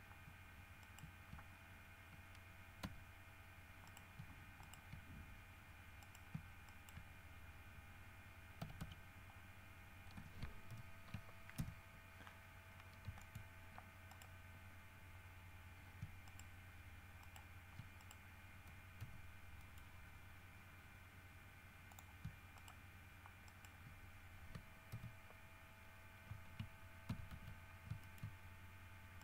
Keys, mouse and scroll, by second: 1.0 shift+right click, 1.7 shift+scroll down 2, 3.0 f, 4.0 right click, 4.8 shift+right click, 6.2 right click, 6.8 shift+right click, 8.8 w, 9.0 s, 10.9 shift+h, 11.8 shift+KP_1, 13.0 scroll up 2, 13.4 shift+middle click, 14.3 right click, 16.4 shift+right click, 17.4 shift+right click, 18.2 shift+right click, 19.2 g, 19.8 middle click, 22.8 shift+right click, 23.6 shift+right click, 25.1 y, 27.3 w, 27.5 s, 28.2 shift+middle click.